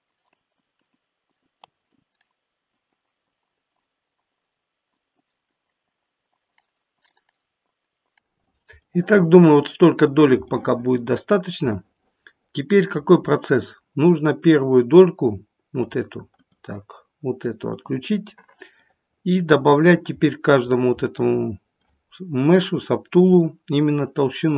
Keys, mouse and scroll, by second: 0.1 click, 0.3 click, 0.8 click, 0.9 click, 1.6 p, 2.7 click, 2.9 click, 3.0 click, 3.3 click, 3.4 click, 4.2 click, 4.4 click, 4.9 click, 5.0 scroll down 2, 5.2-5.6 scroll up 5, 5.5 click, 5.6 click, 5.9 click, 6.3 click, 6.5 click, 7.0 click, 7.7 click, 8.4 click, 8.7 middle click, 8.8 middle click, 9.8-10.1 scroll up 3, 10.4 middle click, 11.7 middle click, 15.8 click, 16.3 click, 17.6 click, 18.7 middle click, 20.1-20.7 scroll up 1, 21.1 middle click, 22.4 middle click, 22.4-22.7 scroll up 1, 22.7 middle click.